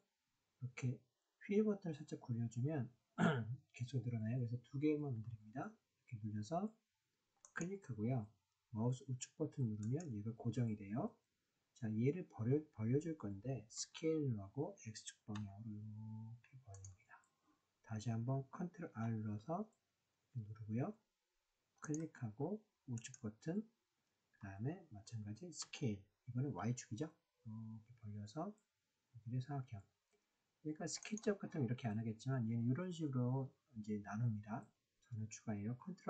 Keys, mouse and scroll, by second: 9.8 right click, 13.7 s, 15.3 x, 16.7 click, 18.8 ctrl+r, 22.9 right click, 25.6 s, 26.6 y, 31.0 click.